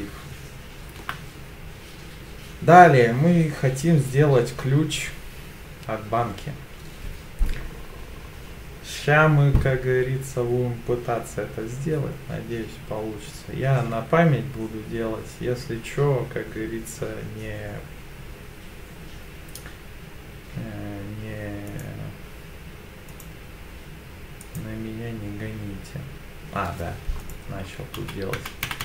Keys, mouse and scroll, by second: 13.7 k.